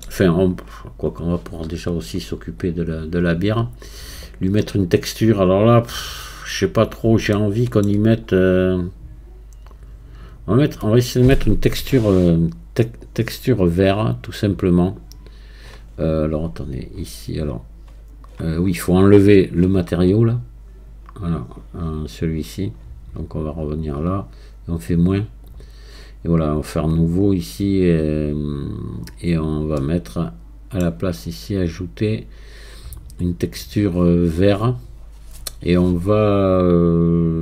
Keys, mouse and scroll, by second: 0.5-5.6 drag, 6.1-7.3 drag, 7.3 shift+middle click, 8.3 scroll up 3, 10.3-16.1 drag, 23.8-27.2 drag, 27.2-27.8 scroll down 1, 29.8-31.7 middle drag, 31.7-37.4 drag.